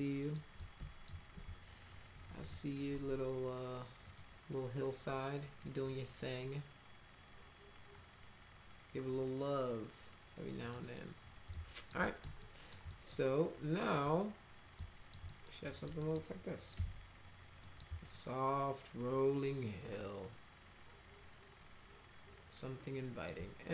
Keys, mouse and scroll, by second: 0.6 alt+middle click, 2.2 alt+y, 4.0 click, 5.6 middle click, 10.6 click, 10.8 right click, 11.5 alt+middle click, 12.0 middle click, 12.4 alt+middle click, 12.9 middle click, 13.9 click, 14.8 alt+middle click, 15.2 middle click, 15.7 middle click, 16.0 middle click, 16.7 F4, 17.6 middle click, 18.1-23.3 alt+middle drag.